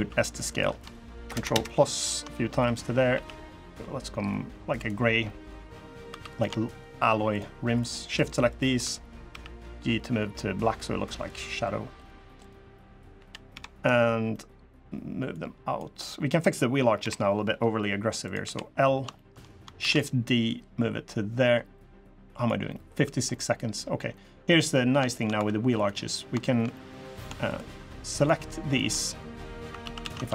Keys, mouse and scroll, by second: 0.9 ctrl+KP_Add, 1.1 ctrl+KP_Add, 1.3 ctrl+KP_Add, 2.9 g, 4.9 scroll up 2, 5.2 scroll down 1, 5.4 middle click, 5.8 3, 6.0 click, 7.1 shift+click, 7.5 shift+click, 7.8 shift+click, 8.2 shift+click, 9.0 g, 11.4 scroll down 3, 11.7 click, 12.1 click, 12.9 l, 13.3 KP_3, 14.0 scroll down 1, 14.1 middle click, 15.1 click, 16.7 KP_3, 18.0 click, 18.2 l, 18.5 scroll down 4, 18.9 shift+middle click, 19.5 shift+d, 20.2 click, 22.5 middle click, 22.7 scroll up 2, 23.0 middle click, 23.8-24.4 scroll up 2, 24.5 middle click, 24.9 shift+middle click, 25.1 2, 25.5 click, 25.8 middle click, 25.9 scroll down 1, 26.5 middle click, 27.2 shift+click, 27.9 click, 28.4 shift+click, 28.7 middle click, 29.2 scroll up 1, 29.6 ctrl+z, 29.8 ctrl+z, 30.2 shift+click.